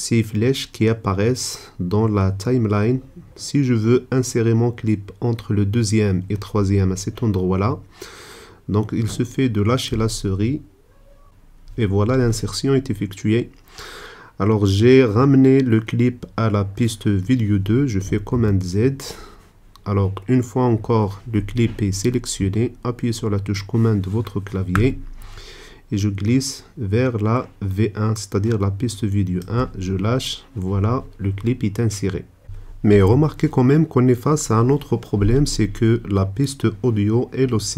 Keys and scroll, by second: 18.4 super+z.